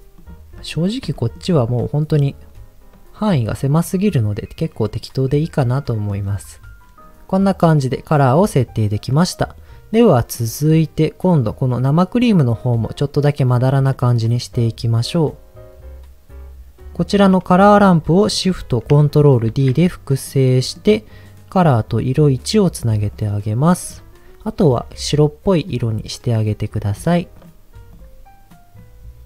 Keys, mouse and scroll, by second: 0.2 click, 0.6 middle click, 0.8 scroll up 1, 1.1 shift+middle click, 1.4-2.1 scroll up 3, 3.7 scroll down 1, 4.9-6.1 middle drag, 6.3 scroll down 1, 6.9 scroll down 2, 7.0 middle click, 10.3 middle click, 13.9 middle click, 16.9 click, 19.4 ctrl+shift+d, 20.3 click, 20.5 middle click, 20.8 scroll up 1, 22.0 click, 23.1 click, 23.7 middle click, 23.9 scroll up 3, 24.6 click, 26.8 click, 27.3 click, 27.9 click.